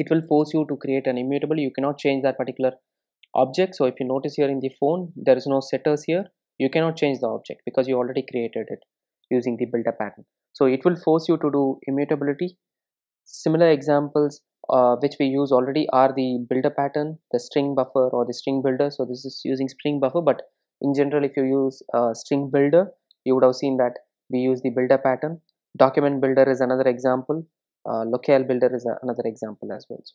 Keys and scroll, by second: 4.4 super+b, 12.2 super+e.